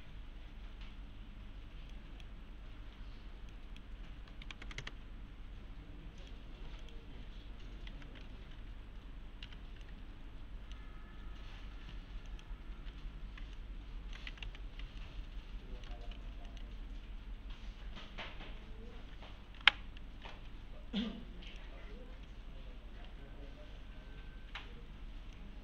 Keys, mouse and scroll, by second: 1.9-2.5 click, 6.2 click, 7.9 shift+f, 8.4-8.9 scroll down 1, 9.5 g, 9.8 scroll up 1, 9.9-10.8 middle click, 12.3 click, 13.6-14.2 alt+middle click, 14.1-15.0 typing, 14.7 scroll down 1, 15.0-15.9 alt+middle click, 16.1-16.7 scroll up 2, 16.1 g, 16.5 middle click, 21.5 click, 25.3-25.6 click.